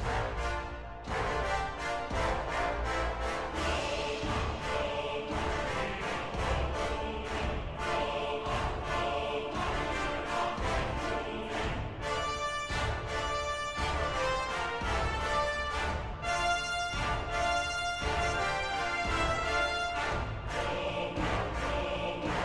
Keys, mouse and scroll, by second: 2.7 ctrl++, 14.8 ctrl+-, 17.6 ctrl++, 21.7 ctrl+-.